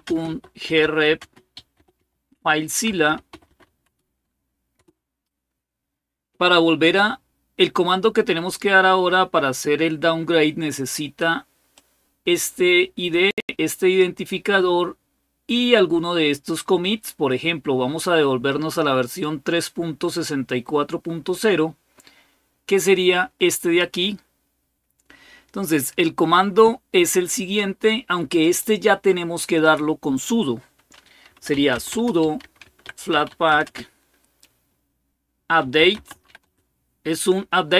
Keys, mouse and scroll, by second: 0.0-5.1 typing, 11.5-13.8 drag, 21.1-23.6 drag, 24.1 click, 26.0 scroll up 1, 28.2 click, 30.8-33.8 typing, 35.2-36.7 typing.